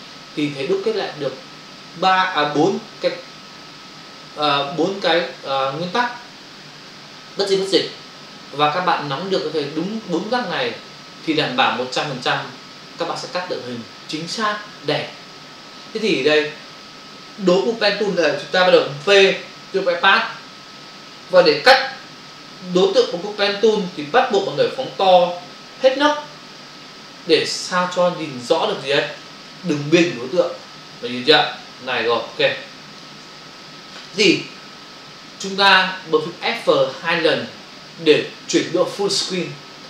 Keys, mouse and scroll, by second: 21.9 f, 24.5 space, 24.9 ctrl+click, 26.6 click, 28.1 ctrl+click, 29.5 ctrl+-, 31.4 ctrl+-, 31.9 space, 33.4 space.